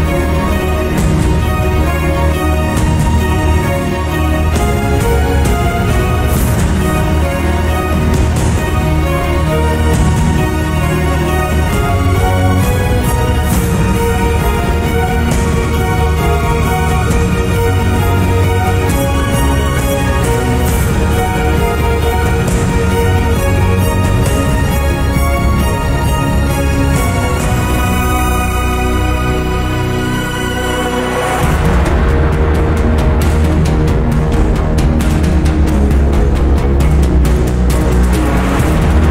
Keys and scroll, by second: 14.3 Down.